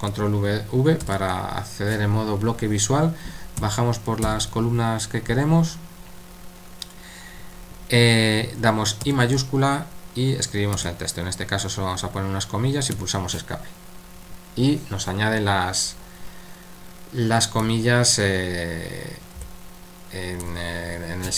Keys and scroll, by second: 1.0 ctrl+v, 4.2 typing, 9.0 typing, 10.7-11.5 typing, 12.7-13.4 typing, 17.6 typing, 19.4 typing, 20.4 typing.